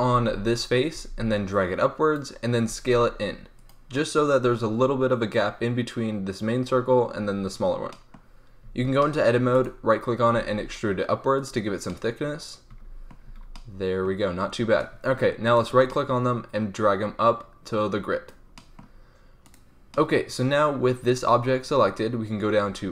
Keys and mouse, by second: 0.1 z, 0.9 z, 2.6 s, 7.8 drag, 8.6 Tab, 10.3 e, 13.2 Tab, 15.4-15.8 right drag, 16.8-18.2 middle drag, 18.2 drag, 18.4 middle drag, 19.4 click, 20.0-22.2 drag, 22.2-22.9 middle drag.